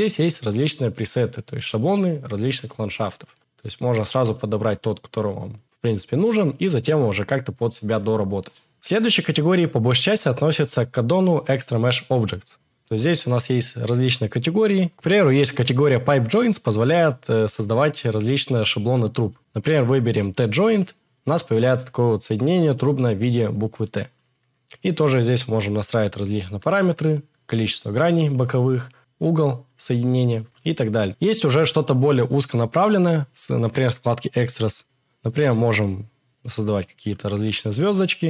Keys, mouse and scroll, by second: 0.0 click, 1.6-2.9 drag, 3.4-4.6 drag, 5.6-6.8 drag, 26.5-28.2 drag, 29.1-30.8 drag, 38.2 click.